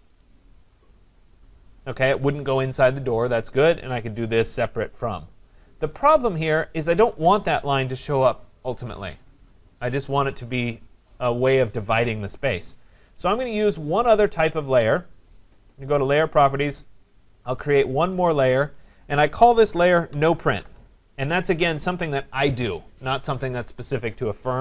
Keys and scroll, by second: 7.1 Escape.